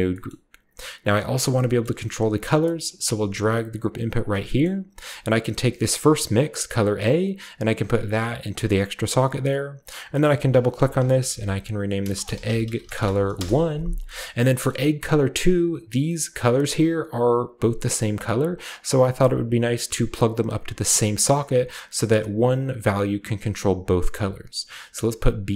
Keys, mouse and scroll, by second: 0.3 middle click, 1.2-2.8 drag, 1.5-2.5 scroll down 1, 2.5-2.8 scroll down 1, 3.1 g, 3.3 middle click, 3.3-4.2 scroll down 1, 4.2 click, 4.8-5.8 scroll up 1, 5.8-8.5 drag, 8.7 click, 9.8 click, 9.9 click, 10.8-13.3 typing, 14.2-14.5 middle drag, 14.2-14.7 scroll down 2, 14.6 middle click, 14.6 typing, 18.7 click, 20.7 drag, 21.4 click, 24.1 click, 25.2 click.